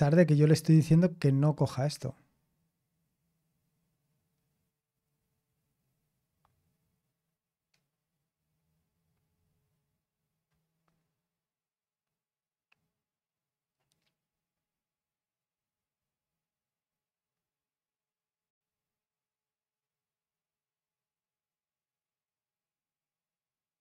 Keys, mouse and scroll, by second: 1.9-5.2 scroll down 1, 5.2-9.7 scroll down 1, 9.7-10.8 scroll down 1, 10.8-14.2 scroll down 1, 14.2-15.4 scroll down 1, 15.4-15.9 scroll down 1, 16.8-18.3 scroll down 1, 18.3-23.8 scroll down 1.